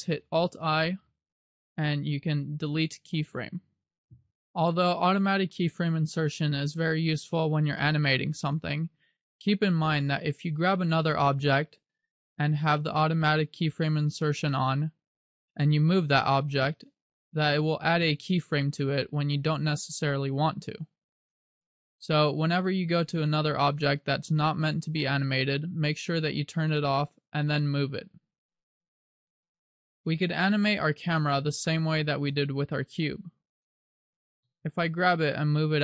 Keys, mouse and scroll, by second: 0.9 alt+i, 12.2 right click, 16.9 g, 17.7 click, 19.8 click, 22.6 ctrl+z, 23.0 ctrl+z, 26.3 click, 27.7 g, 29.4 click, 30.0-30.9 scroll down 2, 31.8 shift+middle click, 32.7-33.3 scroll down 2, 33.7 right click, 34.6 g.